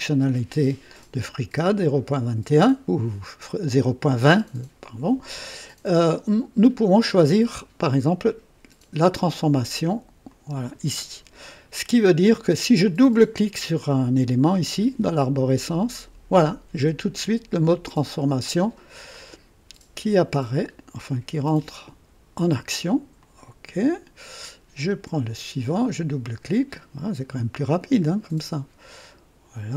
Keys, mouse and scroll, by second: 10.2 click, 15.5 click, 17.6-22.0 drag, 23.1 click, 24.9 click, 25.8 click, 28.3-29.7 drag.